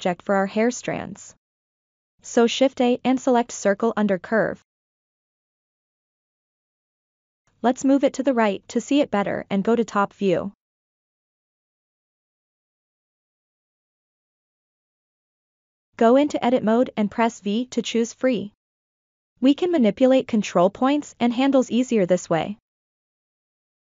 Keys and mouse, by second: 0.0-0.8 shift+middle drag, 1.1 ctrl+middle click, 1.6 shift+middle click, 3.5 shift+a, 7.1 g, 7.6-8.6 drag, 8.8-9.4 shift+middle drag, 9.7-10.1 middle drag, 10.5 KP_7, 11.5 ctrl+middle drag, 12.0 shift+middle drag, 12.6 click, 13.6-14.2 ctrl+middle drag, 15.1 Tab, 17.5 v, 21.6-23.0 drag, 23.6 click.